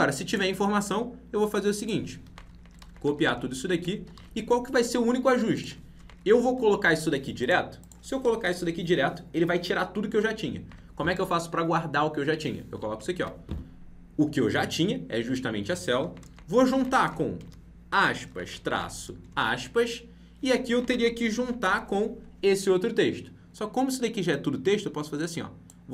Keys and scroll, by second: 2.8 ctrl+c, 4.1 ctrl+v, 6.7 ctrl+c, 13.1 ctrl+v.